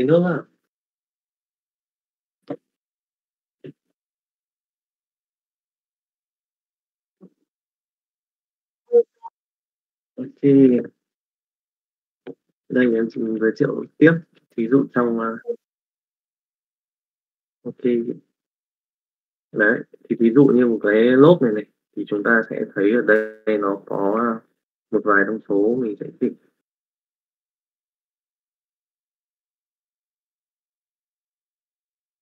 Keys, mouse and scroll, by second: 13.1 middle click, 14.1 click, 16.4 middle click, 17.0 alt+a, 17.1 shift+middle click, 18.2 middle click, 19.1 middle click, 19.8 shift+middle click, 20.2 middle click, 24.0 middle click, 26.2 middle click, 27.1-28.6 middle drag, 29.6 middle click.